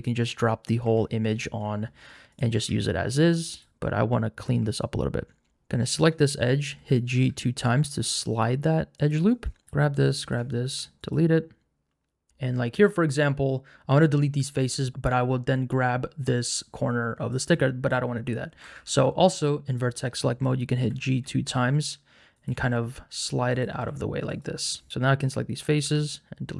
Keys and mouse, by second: 0.8 Tab, 2.6 Tab, 3.5 alt+click, 6.7 g, 7.1 g, 9.0 click, 9.6 alt+3, 10.6 x, 12.3 KP_Decimal, 12.6 middle click, 17.3 click, 18.6 1, 19.3 click, 20.9 g, 21.2 g, 22.3 click, 22.5-25.8 typing, 24.3 click.